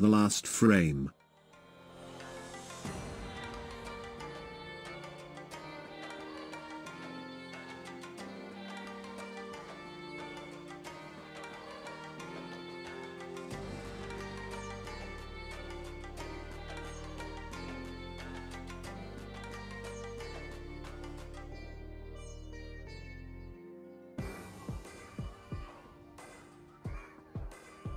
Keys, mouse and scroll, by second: 19.6 space, 22.1-22.9 scroll down 5, 22.9 scroll down 3, 23.8-25.4 scroll up 3, 25.9-27.9 drag.